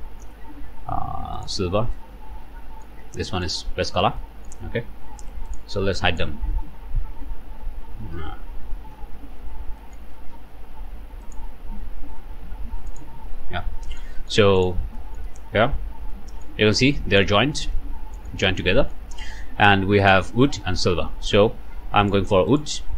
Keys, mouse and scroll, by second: 1.4 click, 2.0-3.0 drag, 3.0 typing, 3.4 ctrl+shift+click, 4.2 ctrl+shift+middle click, 4.2 ctrl+click, 5.5 click, 6.1 shift+click, 7.2 h, 8.4 ctrl+h, 9.4 Escape, 9.8 middle click, 10.0 scroll up 3, 10.3 alt+a, 11.2 click, 12.4 h, 12.9 click, 13.2 h, 13.6 scroll up 2, 13.7 shift+middle click, 13.7 shift+h, 13.9 shift+middle click, 13.9 shift+click, 14.1 shift+middle click, 14.6 shift+click, 15.0 shift+click, 15.3 middle click, 16.1 middle click, 16.7 Tab, 16.7-17.3 typing, 17.0 middle click, 17.7 click, 18.5 Tab, 18.8 click, 20.0 click, 20.5 click, 22.0 click, 22.5 click.